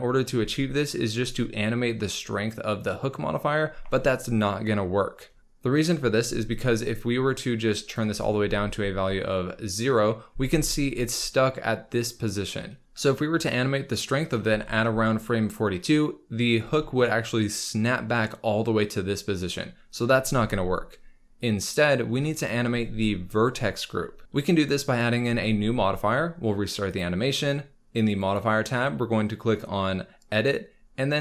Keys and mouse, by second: 6.8-8.0 drag, 8.4 space, 10.3 space, 21.4 click, 25.3 ctrl+s, 28.0-31.2 drag.